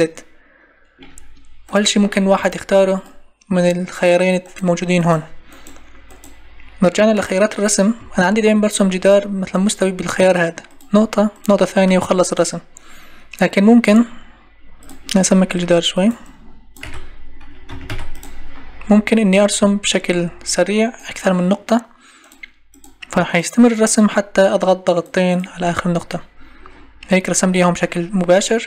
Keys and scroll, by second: 2.3 Escape, 8.0 Escape, 16.8 2, 17.7 Caps_Lock, 17.9 2.